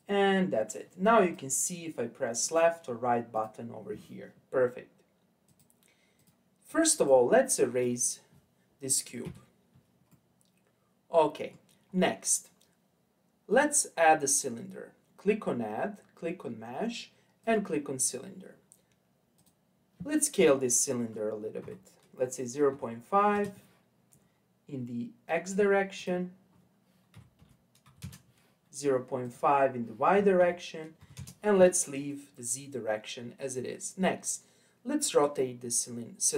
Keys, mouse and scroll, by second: 1.2 click, 2.4 right click, 3.3 click, 5.5 click, 7.0 click, 9.2 Delete, 10.1-13.1 middle drag, 13.5-16.6 drag, 19.4-22.5 drag, 26.0-29.0 drag, 29.2-32.3 drag, 33.6-36.3 scroll up 2.